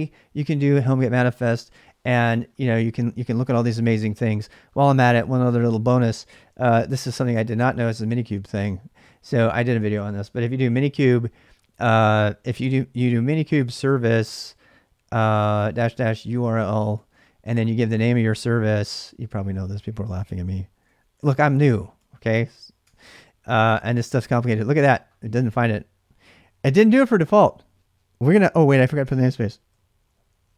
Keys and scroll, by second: 6.3-8.6 typing, 11.9 typing, 13.0-23.2 typing, 28.6-30.5 typing.